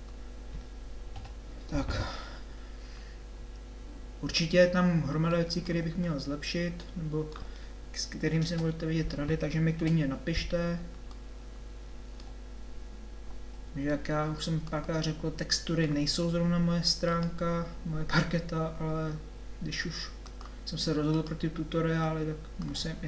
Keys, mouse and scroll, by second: 1.3 KP_7, 8.5 KP_0, 9.8 KP_7, 13.9 middle click, 15.2-16.3 middle drag, 16.3 Tab.